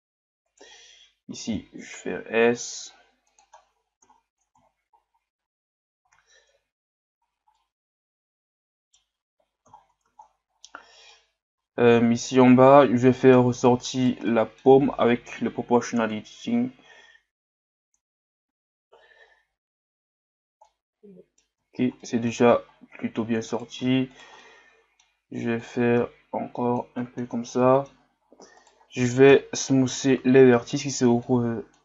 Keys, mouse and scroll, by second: 0.5 alt+right click, 3.6-4.1 scroll down 1, 4.6-6.1 scroll down 10, 6.1 z, 7.2 scroll down 3, 7.5-9.3 middle drag, 9.3-9.8 scroll up 1, 9.8-10.5 scroll down 3, 10.5 scroll up 1, 10.7 Tab, 11.1-14.0 middle drag, 14.0 right click, 14.3 middle click, 15.2 o, 16.1 click, 20.7-21.7 middle drag, 21.7 scroll down 1, 22.0 middle click, 22.7-23.5 scroll up 1, 23.5 right click, 24.1 shift+right click, 24.4-25.6 middle drag, 25.6-27.0 drag, 27.0-28.6 middle drag, 28.6 right click, 29.3 ctrl+KP_Add, 29.8 ctrl+KP_Add, 31.2-31.8 middle drag.